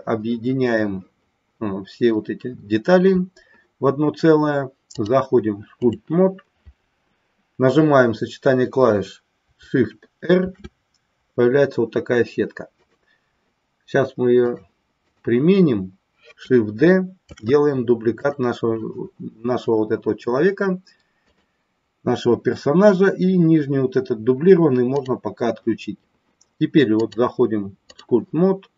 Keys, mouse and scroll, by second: 4.8-6.7 drag, 10.4 shift+r, 14.6 click, 17.5 shift+d, 18.3 click, 21.4 click, 24.9 click, 27.0-28.7 drag.